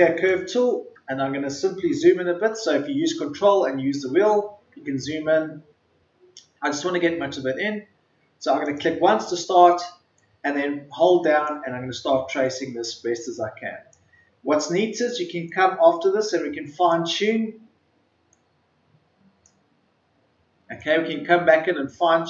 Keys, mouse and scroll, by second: 1.9-2.3 alt+scroll up 1, 3.1-4.1 ctrl+scroll up 1, 4.8-5.2 ctrl+scroll down 1, 5.7 ctrl+scroll down 1, 8.5-22.2 drag.